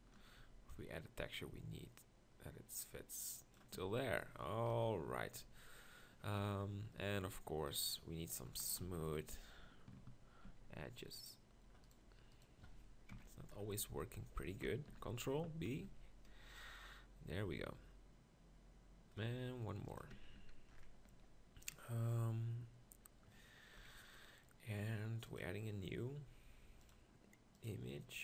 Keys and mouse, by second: 0.4 z, 2.5 middle click, 3.8 Tab, 4.8 KP_1, 5.4 Tab, 8.9 ctrl+l, 10.5 ctrl+b, 13.1 ctrl+KP_Decimal, 14.9 ctrl+l, 15.8 ctrl+b, 20.4 Tab, 20.8 middle click, 23.9 KP_1.